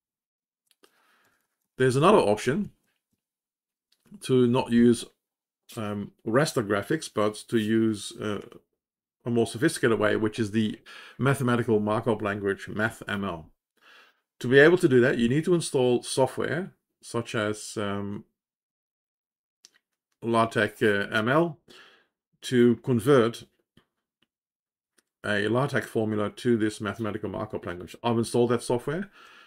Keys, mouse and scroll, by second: 3.7 Down.